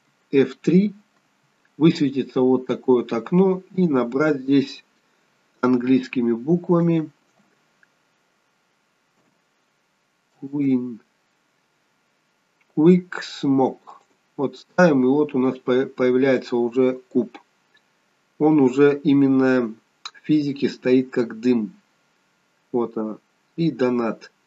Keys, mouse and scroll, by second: 1.2 F3, 21.2 scroll down 3, 21.7 scroll up 3.